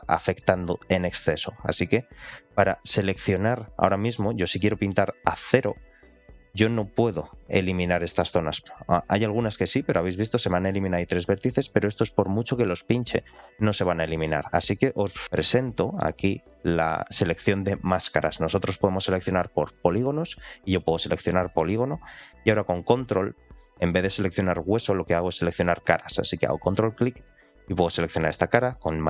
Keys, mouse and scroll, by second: 3.3 click, 4.3 shift+middle click, 5.3 click, 6.8-8.7 drag, 8.9 click, 10.1-10.6 scroll up 2, 10.6 click, 11.5 click, 11.8 click, 12.1 click, 12.2 click, 12.4 click, 12.6 click, 12.8 click, 13.2 click, 13.9-15.7 scroll down 2, 15.7-16.8 scroll down 1, 19.8 click, 21.6-22.8 scroll up 2, 22.8-23.5 scroll up 1, 23.5-24.7 scroll up 1, 26.9-28.2 ctrl+drag.